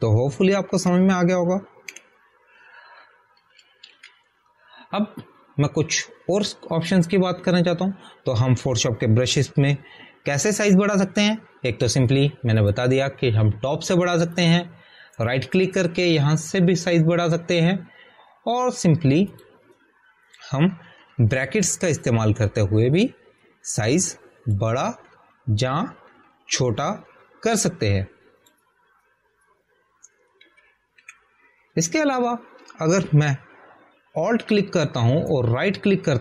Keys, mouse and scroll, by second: 2.6 ctrl+a, 3.8 Delete, 5.8 ctrl+d, 14.6 click, 17.1 right click, 21.3 click, 22.8-24.9 typing, 25.9 click, 27.0-29.1 typing, 29.6 click, 32.3 ctrl+a, 32.8 Delete.